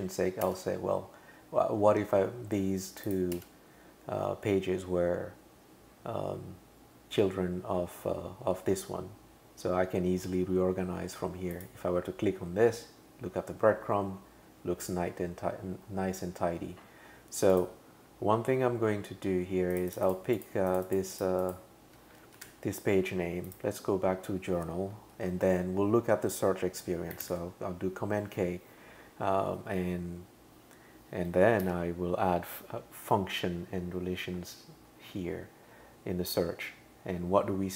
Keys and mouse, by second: 0.5 Tab, 3.1 click, 3.4 Tab, 11.5 click, 17.5 click, 19.7 click, 19.9 click, 20.1 click, 20.4 click, 20.7 click, 22.4 super+c, 23.5 click, 27.2 super+k, 31.6 super+v.